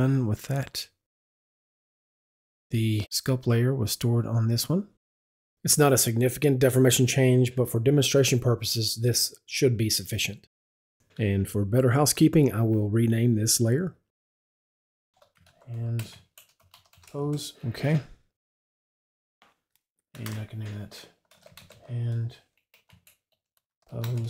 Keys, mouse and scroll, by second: 0.6 click, 2.2 click, 3.6 click, 5.3 click, 12.1 click, 15.0 Left, 15.3-16.9 typing, 17.2 Return, 19.0 click, 19.2 Left, 21.0 Left, 21.3 shift+h, 21.5 shift+a, 21.7 d, 22.8-24.2 typing.